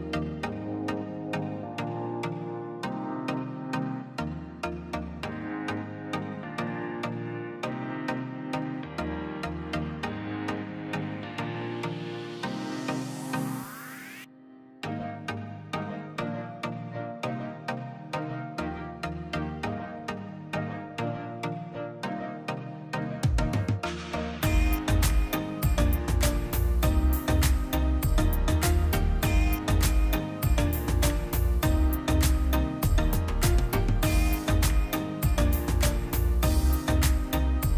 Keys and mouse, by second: 0.8 /, 2.1 Tab, 2.5-3.5 middle drag, 3.5 click, 5.6 shift+z, 6.0-7.3 drag, 7.3 w, 7.5 w, 7.7 w, 9.0 click, 10.9 x, 12.3 middle click, 13.2 shift+z, 13.4-14.9 middle drag, 16.1 r, 17.6-22.7 middle drag, 22.7 r, 24.6-27.0 middle drag, 27.0 click, 27.4 alt+click, 28.2 g, 31.8 r, 33.6-36.3 middle drag, 36.3 1, 37.2 click.